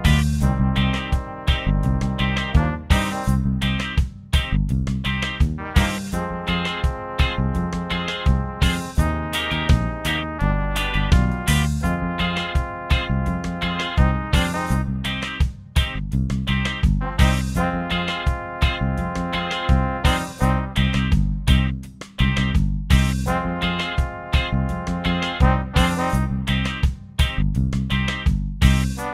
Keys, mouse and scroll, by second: 0.7 click, 1.3 click, 2.4 click, 3.5 shift+click, 4.7 click, 5.3 click, 6.9 click, 7.6-9.5 drag, 10.5-12.0 drag, 13.4 click, 16.5 click, 18.3 click, 19.7 Return, 23.0 click, 25.2 click.